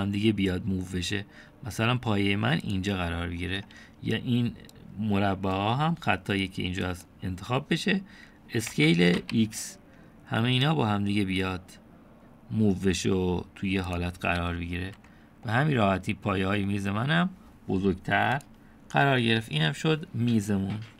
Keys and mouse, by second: 6.0-8.1 drag, 9.7 s, 16.0 Tab, 16.5-17.3 drag, 17.7-18.3 drag, 19.4 click, 20.2-20.9 middle drag.